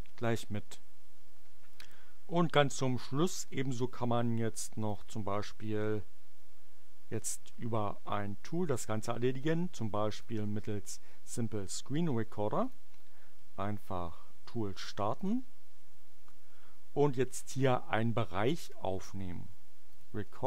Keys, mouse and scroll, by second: 4.9 click, 12.5 click, 15.1 click, 19.7 click.